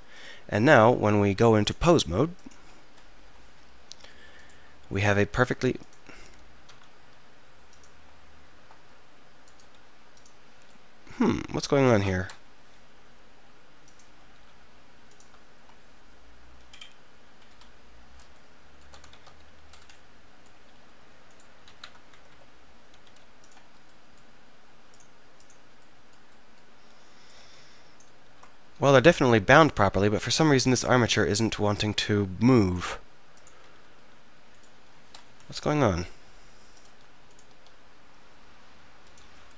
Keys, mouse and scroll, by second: 2.5 click, 3.3 KP_3, 4.4-6.5 drag, 5.0 r, 6.7 r, 8.2 drag, 8.4 click, 8.6-11.9 right drag, 9.8 r, 12.5 KP_3, 14.1-14.7 drag, 14.4 r, 14.7-15.1 right drag, 19.2 shift+c, 20.8 r, 22.2 Escape, 22.3 Escape, 23.1 r, 24.6 right click, 25.0-26.0 drag, 28.3 ctrl+z, 31.5-31.8 drag, 31.8 right click, 34.1 r, 35.3 KP_3, 36.1 r, 37.6 r.